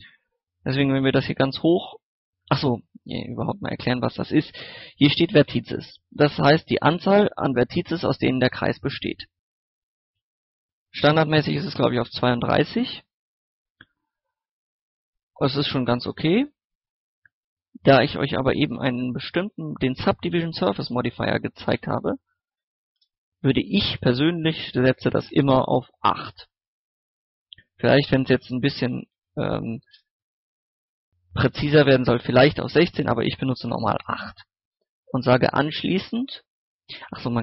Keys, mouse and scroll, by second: 11.7 KP_2, 21.0 click, 21.8 KP_8, 24.7 middle click, 25.0 scroll down 1, 25.2 scroll up 1, 26.0 middle click, 26.6 scroll down 1, 28.1 click, 28.7 KP_1, 28.9 KP_6, 30.8 middle click, 31.5 scroll up 1, 31.6 middle click, 32.6 click, 33.1 KP_8, 34.6-37.4 drag.